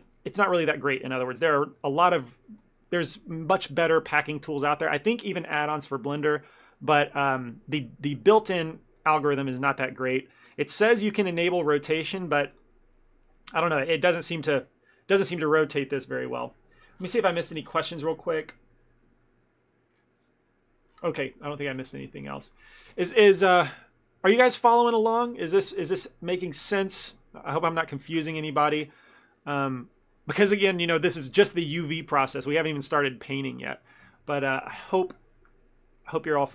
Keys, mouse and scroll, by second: 1.4 shift+middle click, 8.2 ctrl+middle click, 10.6 click, 11.3 click.